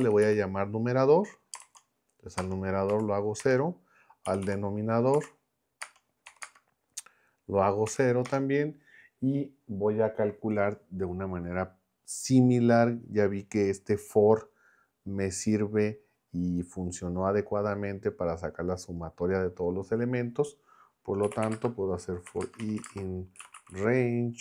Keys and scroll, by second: 0.0-2.9 typing, 3.4 Return, 4.0-6.4 typing, 8.2 Return, 21.0-24.4 typing.